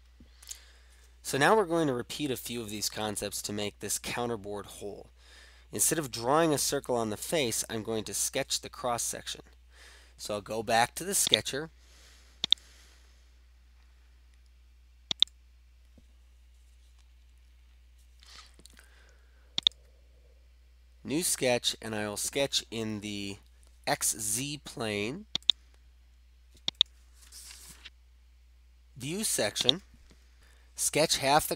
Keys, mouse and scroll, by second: 11.3 click, 12.7-13.6 drag, 15.2 click, 19.6 click, 25.5-26.5 drag, 26.9 click, 29.8 click.